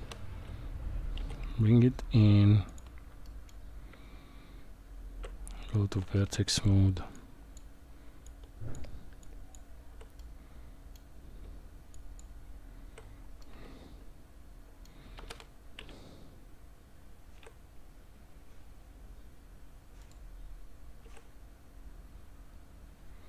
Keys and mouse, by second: 2.7 g, 3.2 middle click, 3.9 Tab, 7.2 click, 8.3 shift+click, 9.3 shift+click, 10.2 middle click, 12.0 shift+click, 13.4-14.8 middle drag, 15.2 g, 21.0 s.